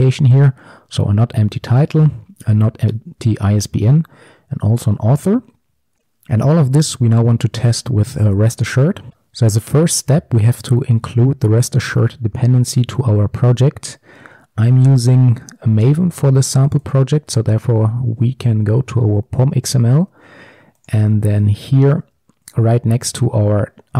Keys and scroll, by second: 5.7 ctrl+alt+Left, 9.1 alt+1.